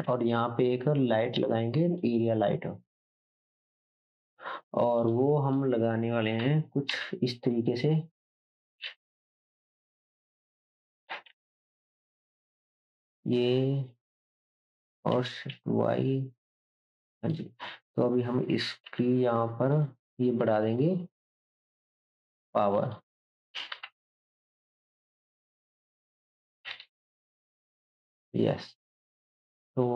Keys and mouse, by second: 0.1 shift+a, 1.1-6.4 right drag, 6.4 KP_1, 6.9 KP_Decimal, 8.8 g, 10.6-18.1 shift+right drag, 11.1 KP_7, 11.3 shift+z, 12.4 s, 15.1 s, 18.1-21.3 drag, 18.6 s, 23.7 KP_0.